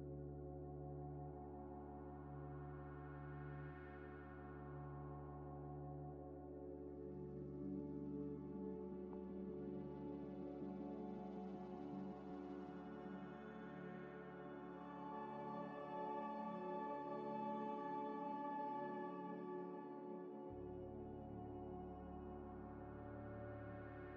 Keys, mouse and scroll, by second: 0.5 scroll down 1, 2.3 g, 2.3 x, 3.2 ctrl+z, 3.4 scroll up 1, 4.1 scroll up 1, 4.1 scroll down 1, 4.4 g, 4.5 x, 5.7 scroll up 1, 6.3 middle click, 7.5 scroll down 1, 8.8 ctrl+z, 9.0 ctrl+z, 9.3 ctrl+z, 9.6 ctrl+z, 9.8 ctrl+z, 10.1 ctrl+z, 10.5 middle click, 11.1 shift+d, 11.5 g, 11.6 x, 12.1 double click, 12.6 shift+click, 13.2 ctrl+-, 14.1 g, 14.2 x, 15.9 s, 18.2 z, 18.9 z, 20.0 scroll, 20.0 scroll up 1, 20.5 middle click, 23.2 middle click, 23.9 scroll down 1.